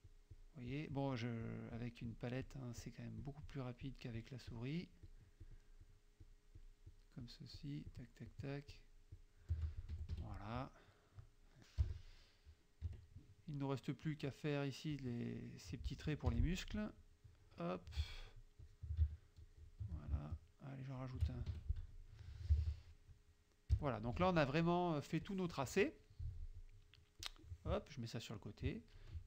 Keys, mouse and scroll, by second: 0.7 shift+click, 1.5 shift+click, 1.8 shift+click, 2.5 shift+click, 2.9 shift+click, 3.2 shift+click, 3.9 shift+click, 4.2 shift+click, 5.0 shift+click, 5.5 shift+click, 5.9 shift+click, 6.2 shift+click, 6.7 shift+click, 7.2 shift+click, 8.0 shift+click, 8.4 shift+click, 8.8 shift+click, 9.2 shift+click, 10.0 shift+F1, 10.3 shift+F2, 10.9 click, 11.9 KP_Subtract, 13.0 KP_Subtract, 13.8 click, 15.0 click, 16.3 F6, 17.3 click, 18.7 shift+click, 19.5 shift+click, 20.9 shift+click, 21.6 shift+F1, 22.0 shift+click, 22.6 ctrl+shift+s, 22.8 ctrl+click, 23.8 KP_Subtract, 24.2 F1, 24.7 click, 25.3-26.7 drag, 27.2-28.7 drag, 28.7 ctrl+click.